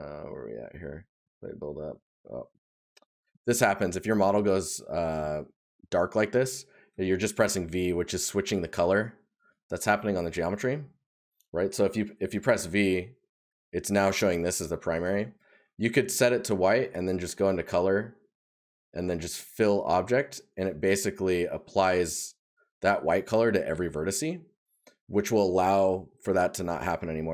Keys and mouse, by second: 1.2 right click, 2.5 right click, 3.8 right click, 10.0 right click, 18.4 right click, 21.7 right click, 23.7 right click.